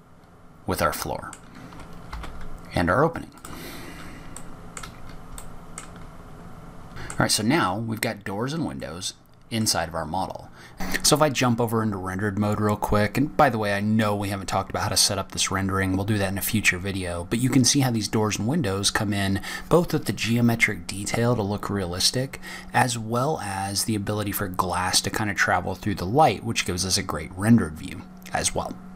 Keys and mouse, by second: 1.6 middle drag, 1.9 g, 5.8-6.2 middle drag, 6.9 ctrl+z, 7.1 n, 7.8 click, 10.2 click.